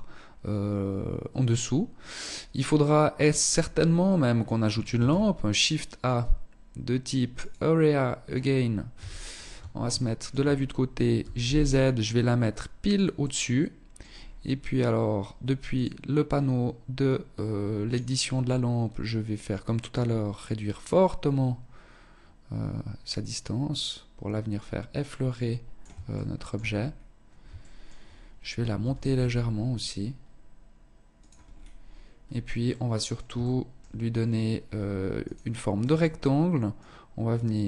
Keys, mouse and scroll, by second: 1.4 scroll down 2, 1.9 middle click, 4.1 shift+a, 8.0 KP_3, 8.9 shift+middle click, 10.3 g, 12.0 click, 12.3 middle click, 13.3-13.7 scroll up 4, 14.9 click, 16.1 click, 18.5 click, 25.2 shift+middle click, 25.8-26.5 scroll up 5, 26.7 shift+middle click, 27.9 g, 30.5 scroll down 4, 31.3-31.8 scroll down 3, 31.8 middle click, 32.6 shift+middle click, 33.7-34.3 scroll down 3, 34.3 click, 35.9 click.